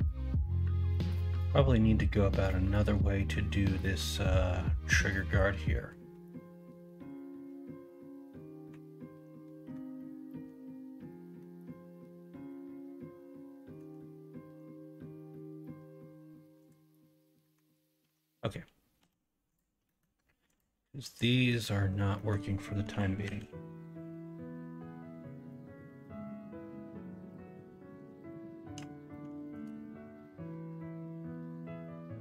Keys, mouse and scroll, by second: 0.9 middle click, 11.3-13.7 middle drag, 17.4 middle click, 18.0 Tab, 18.9 x, 19.8 middle click, 21.0 click, 21.4 middle click, 22.2 middle click, 22.8 KP_1, 23.2 KP_3, 29.0-29.5 shift+middle drag.